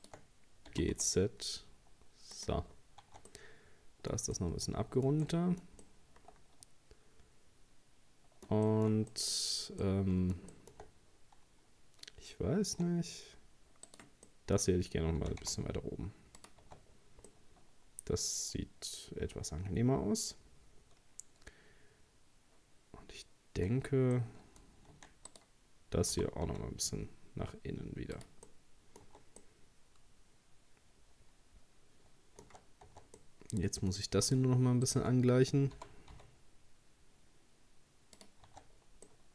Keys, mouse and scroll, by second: 0.0 shift+right click, 0.7 g, 2.7-3.0 scroll down 3, 3.0 Tab, 3.3-9.4 middle drag, 9.4-9.8 scroll up 2, 9.8-10.9 middle drag, 10.9-11.5 scroll up 1, 12.6 Tab, 13.9 right click, 14.3 middle click, 15.2 g, 16.6 Tab, 16.9 scroll down 2, 17.3-20.4 middle drag, 23.7-24.1 scroll up 1, 24.2 middle click, 24.9 Tab, 25.3 right click, 26.1 g, 28.5 middle click, 29.1 Tab, 29.4-32.4 middle drag, 32.9 Tab, 33.2-34.3 middle drag, 34.3 right click, 34.9 shift+right click, 35.8 g, 38.5 Tab, 38.7-39.1 scroll down 1, 39.1-39.3 middle drag.